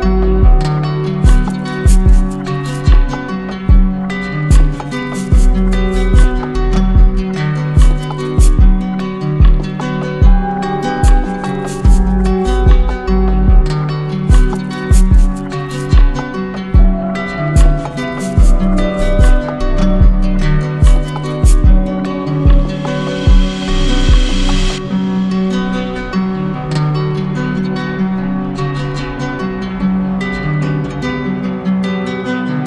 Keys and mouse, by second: 0.4 click, 3.6 click, 5.0 alt+click, 6.9 click, 8.3 alt+right click, 9.7 alt+right click, 10.0 ctrl+click, 11.9 ctrl+click, 17.0 click, 18.1 ctrl+click, 18.8 right click, 24.5 click, 27.2-28.3 drag.